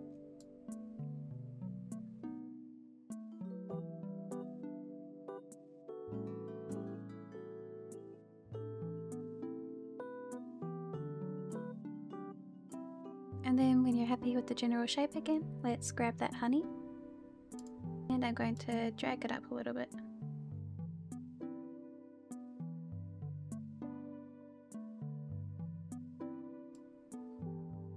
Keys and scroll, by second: 7.4 shift+h, 8.0 shift+h, 8.2 shift+h, 9.5 h, 11.6 shift+h, 12.4 h, 12.7 h, 13.0 h, 22.9 ctrl+z, 23.7 h, 24.1 h, 24.3 h, 25.1 h.